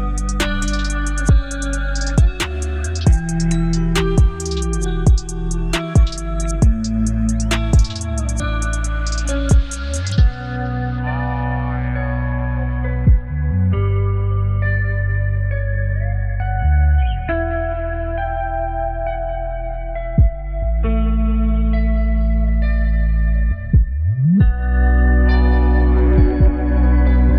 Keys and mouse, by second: 3.1 click, 4.6-6.9 drag, 7.2-9.0 drag, 10.0 click, 10.3 space, 12.4 space, 13.4-14.6 drag, 14.8 space, 16.4 shift+space, 16.5 shift+click, 18.9 space, 19.9 click, 20.4-21.0 drag, 21.3 middle click, 21.7 middle click, 22.7 middle click, 23.2 click, 24.2-25.5 drag.